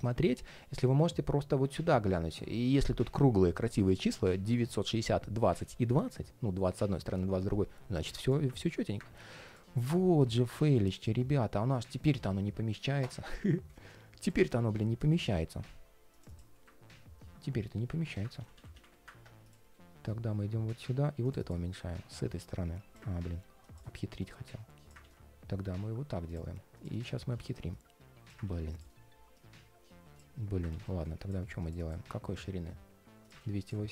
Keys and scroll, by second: 16.3 ctrl+shift+4, 18.1 super+z, 18.5 super+z, 19.4 ctrl+shift+4, 22.8 super+z, 24.7 super+z, 28.2 super+z, 30.4 super+z, 33.1 super+c.